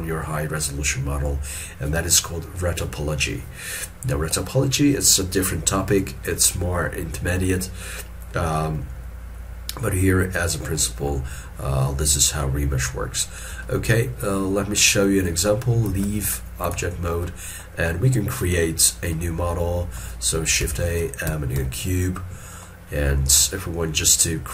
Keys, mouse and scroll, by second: 10.9 middle click, 13.6 scroll down 1, 13.7 shift+middle click, 16.0 ctrl+Tab, 20.7 shift+a, 22.7 middle click.